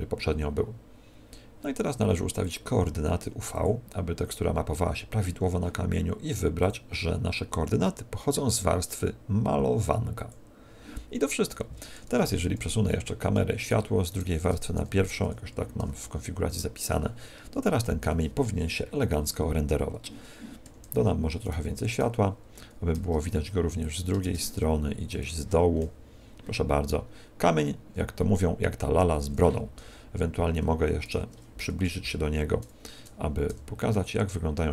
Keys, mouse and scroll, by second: 13.9 scroll down 6, 14.7 m, 15.7 1, 17.5 KP_0, 22.9 shift+d, 24.2 shift+d, 25.1 click, 28.9 Escape, 28.9 scroll down 3, 29.8 KP_0, 31.8 KP_0, 33.5 g.